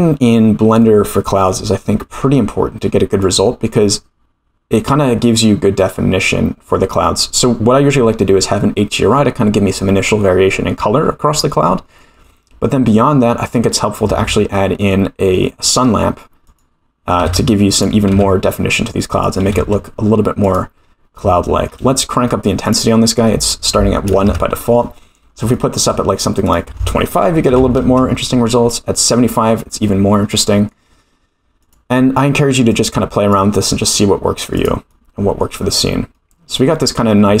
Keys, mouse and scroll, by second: 0.3-0.8 scroll down 2, 0.8-1.5 middle drag, 2.2 scroll up 4, 3.2-3.6 middle drag, 4.8 scroll up 2, 6.5-7.8 scroll down 4, 9.7-10.0 middle drag, 11.8-12.2 scroll down 3, 12.2-12.7 middle drag, 13.0-14.0 scroll down 2, 14.1 shift+a, 17.2 g, 18.1 r, 19.4 r, 20.8-21.4 scroll up 3, 21.4 shift+middle click, 22.6 click, 23.4 click, 25.3 scroll down 1, 25.5 shift+middle click, 26.4-28.4 drag, 28.9-29.3 middle drag, 29.8-30.7 middle drag, 31.6 click, 34.5 click, 34.9-35.4 middle drag, 36.1 middle click, 36.9-37.4 scroll up 3.